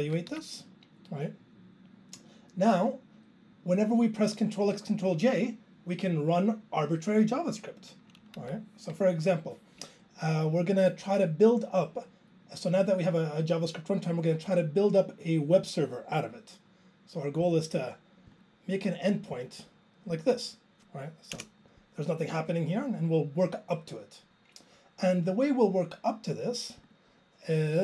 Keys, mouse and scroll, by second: 1.1 ctrl+e, 8.4 Down.